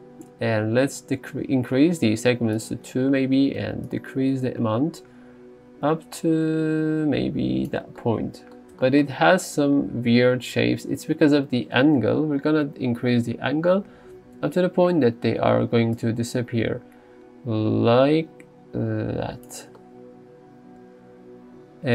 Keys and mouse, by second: 4.0-7.8 shift+drag, 16.2-19.5 drag.